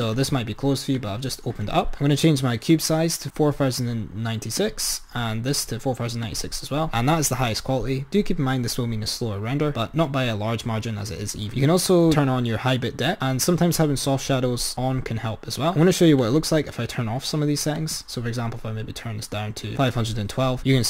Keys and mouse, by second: 0.0-4.3 drag, 4.7-6.3 drag, 15.6 click, 16.5 click, 17.7-19.9 drag.